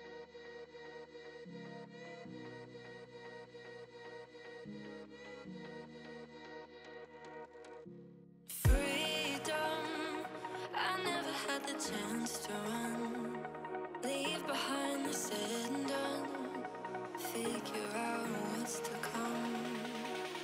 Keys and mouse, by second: 0.0 click, 1.1 click, 5.7 click, 7.7 click, 11.1 click, 11.5 click, 12.6 click, 13.9 click, 14.5 click, 15.3 click, 17.9 click, 19.2 click.